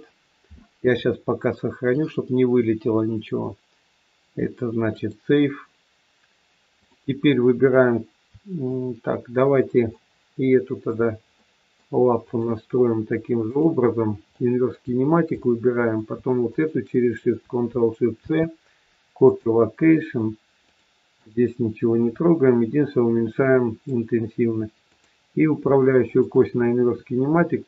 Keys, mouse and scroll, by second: 1.8 click, 6.7 click, 10.0 middle click, 11.3 middle click, 12.2 click, 13.4 click, 14.2 middle click, 15.3 middle click, 16.4 shift+click, 18.2 ctrl+shift+c, 20.7 click, 21.9 click, 25.9 shift+click.